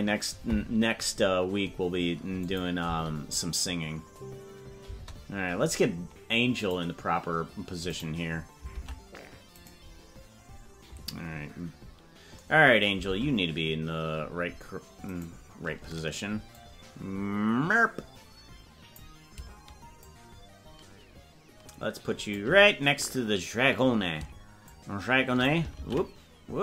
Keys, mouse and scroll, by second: 2.5 click, 5.0 space, 6.5 click, 7.9 click, 8.8 ctrl+Tab, 9.7-11.1 right drag, 13.1 ctrl+Tab, 15.2 right click, 16.5-19.0 drag, 20.0-22.4 shift+drag, 24.6 shift+click.